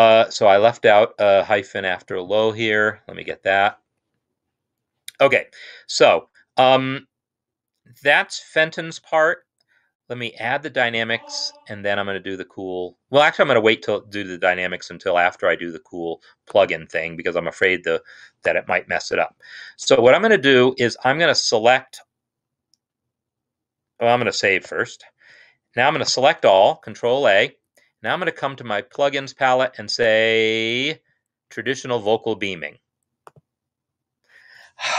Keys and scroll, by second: 3.2 -, 3.8 Escape, 13.5 Escape, 24.8 ctrl+s, 26.1 ctrl+a.